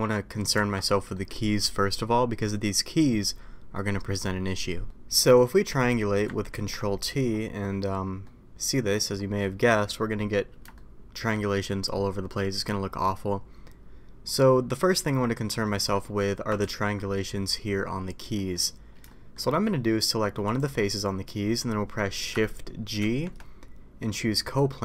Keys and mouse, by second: 0.5 Tab, 1.1 middle click, 4.8 middle click, 5.7 a, 6.6 ctrl+t, 8.2-8.9 middle drag, 10.7-11.2 shift+middle drag, 15.6 middle click, 16.7 ctrl+z, 18.3 middle click, 19.1 shift+middle drag, 23.0 shift+g.